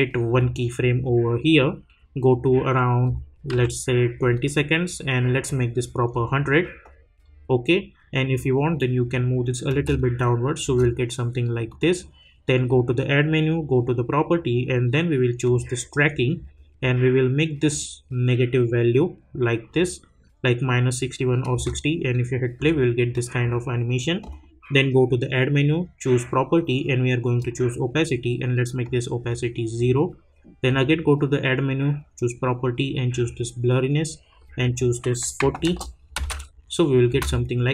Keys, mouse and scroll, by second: 0.3 click, 3.5 =, 4.3-9.7 drag, 9.7 space, 11.7 click, 15.4 click, 17.7-21.5 drag, 21.5 space, 23.1 click, 27.4-30.7 drag, 33.1 click, 35.6 Return, 36.1 space.